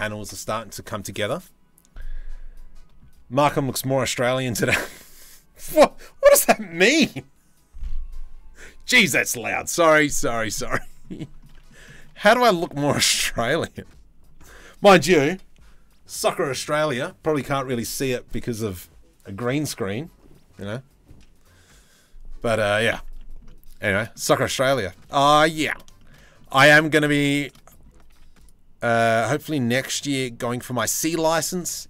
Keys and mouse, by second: 11.1 drag, 11.5 shift+click, 11.7 drag, 12.2 shift+drag, 13.3 click, 14.0 Tab, 22.8 click, 23.4 shift+middle click, 24.4 shift+middle click, 25.2 middle click, 25.6 shift+middle click, 25.8 middle click, 26.3 shift+middle click, 27.0 shift+middle click, 27.7 ctrl+r, 29.7 3, 31.4 Delete.